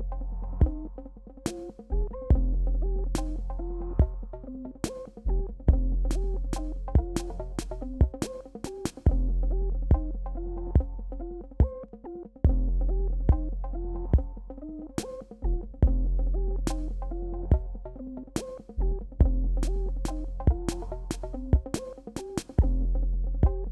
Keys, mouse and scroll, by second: 1.1 click, 4.8 click, 7.1 b, 7.7 click, 10.2 shift+x, 10.6 click, 15.3 click, 16.8 ctrl+d, 18.9-20.8 drag, 20.8 alt+scroll down 1.